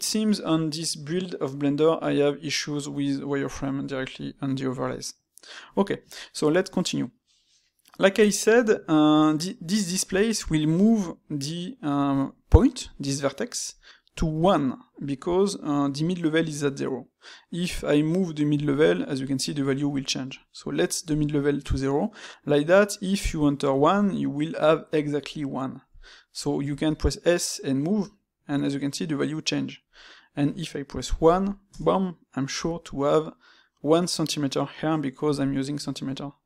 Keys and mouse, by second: 6.1-9.9 middle drag.